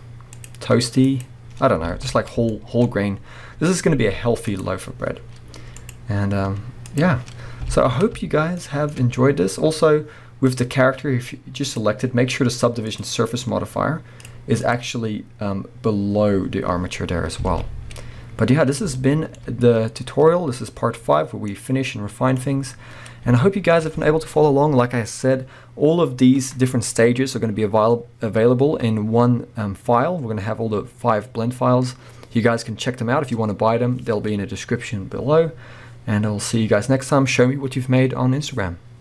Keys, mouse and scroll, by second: 2.0 alt+a, 2.6-4.6 shift+middle drag, 4.6 click, 7.3-7.7 scroll down 1, 7.7 alt+a, 8.6-10.6 shift+middle drag, 9.0-10.6 scroll up 2, 10.6 click, 13.1-17.2 drag, 17.2 scroll down 1, 17.5 alt+a, 17.7 scroll up 1, 18.6-19.0 scroll down 1, 19.0-21.5 shift+middle drag, 21.5-23.4 drag, 22.7-23.3 scroll up 1, 23.4-39.0 shift+middle drag.